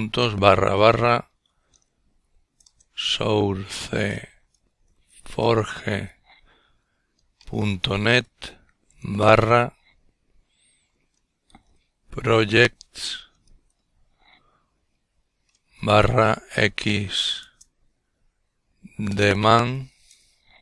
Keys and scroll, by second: 0.0-6.9 typing, 8.7-10.7 typing, 13.7-18.9 typing.